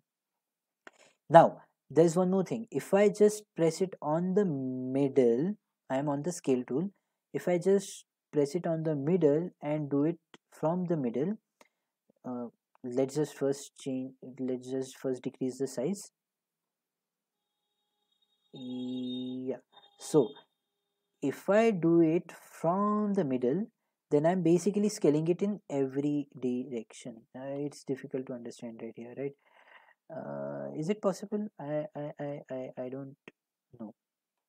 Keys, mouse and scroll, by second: 0.3 click, 12.4 click, 14.7 click, 16.7 click, 18.6 click, 22.3 click, 26.3 click, 28.3 click, 28.6 click, 29.1-30.2 drag, 30.6-31.1 drag, 31.1-33.7 middle drag, 33.7 click.